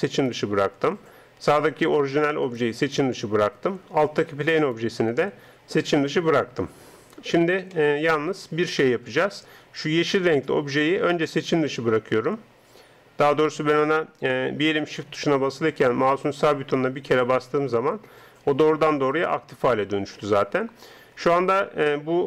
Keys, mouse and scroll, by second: 2.4-5.9 right drag, 5.9-11.3 middle drag, 11.3 right click, 18.3-18.7 scroll up 1, 18.7-20.2 scroll down 1, 20.2 middle click.